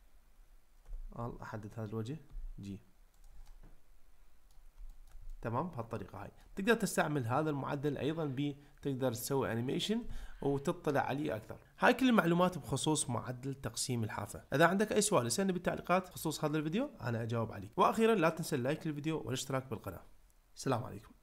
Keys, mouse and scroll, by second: 0.9 l, 2.3 g, 3.2 click, 3.5-4.6 middle drag, 4.9 ctrl+middle click, 5.3-6.5 middle drag.